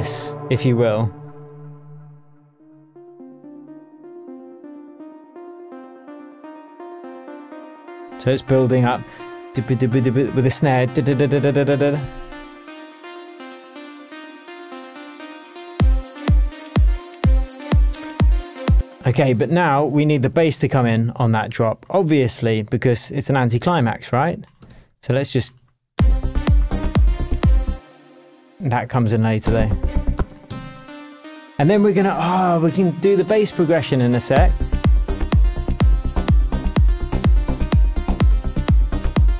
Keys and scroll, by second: 18.7 space, 23.4 super+c, 24.6 super+v, 25.9 space, 27.7 space, 29.4 space, 30.4 space, 31.9 super+d, 38.2 super+d.